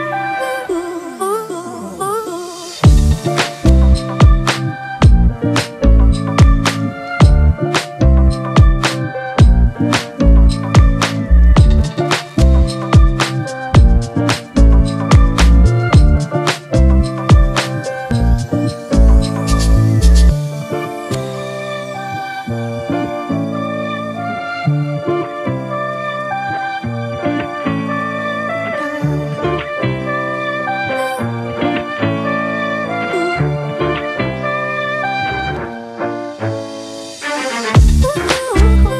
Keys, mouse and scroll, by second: 1.6 double click, 8.9-12.1 scroll down 1, 30.0-32.7 scroll up 1.